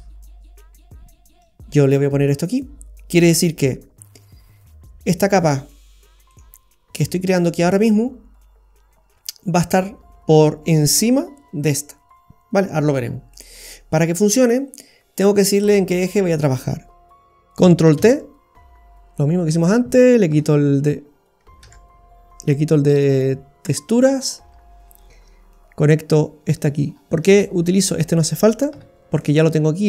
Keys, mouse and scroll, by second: 1.4 click, 5.5 scroll up 3, 6.3 middle click, 6.4 scroll down 1, 12.8-13.6 scroll down 7, 13.6 middle click, 16.0 click, 16.9 click, 18.1 ctrl+t, 19.5 click, 20.3 Delete, 21.7 ctrl+z, 22.4 click, 23.7 Delete, 23.7 click, 24.1-25.5 scroll up 9, 25.5 click, 27.0 scroll down 3, 28.0 click, 28.0-28.4 scroll down 2, 28.9 Delete, 29.2 middle click.